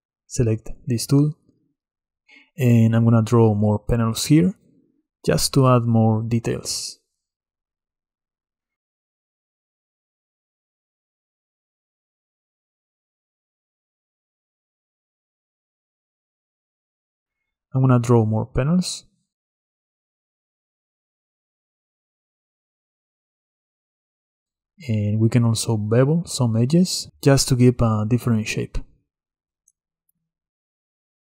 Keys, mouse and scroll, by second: 0.8 click, 1.5-3.2 middle drag, 3.2 click, 6.5 click, 8.6 click, 9.7 click, 10.8 click, 12.0-12.6 drag, 13.1-13.9 drag, 16.0 click, 17.0 middle drag, 17.2 ctrl+z, 17.4 Tab, 17.7-19.0 middle drag, 19.0 click, 21.5-23.2 drag, 24.1-25.3 drag, 26.4 ctrl+b, 29.0 click, 29.8 ctrl+b, 30.5 Tab, 30.7 Tab.